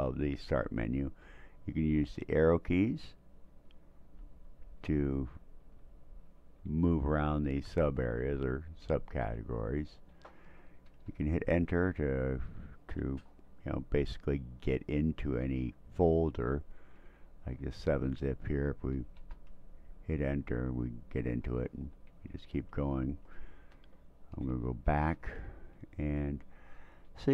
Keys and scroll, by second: 1.9 Right, 2.3 Right, 2.8 Right, 3.5 Right, 4.2 Tab, 5.7 Tab, 6.3 Right, 6.6 Right, 6.7 Right, 7.0 Right, 7.4 Right, 7.7 Right, 9.2 Tab, 10.9 Return, 16.3 Down, 16.6 Down, 16.8 Down, 17.0 Down, 17.2 Down, 17.3 Down, 17.5 Down, 17.8 Down, 19.2 Return, 21.4 Down, 21.6 Down, 21.8 Down, 22.2 Down, 22.5 Down, 23.8 Tab, 25.1 Return, 26.8 Down, 27.1 Down.